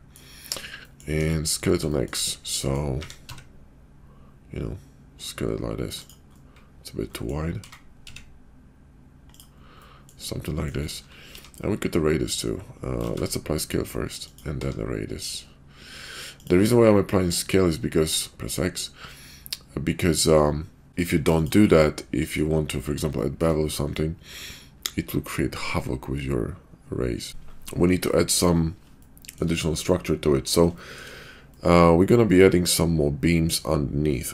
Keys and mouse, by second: 0.7 middle click, 1.1 KP_5, 1.9 shift+middle click, 2.9 s, 7.1 middle click, 7.5 s, 9.8-10.1 middle drag, 10.4 shift+middle drag, 11.2 q, 13.0 ctrl+a, 14.6 q, 21.8-22.4 middle drag, 23.1-23.4 shift+middle drag, 23.9-27.3 middle drag, 28.1 middle click, 29.0-29.4 shift+middle drag, 30.7 shift+middle drag, 31.5-33.5 middle drag.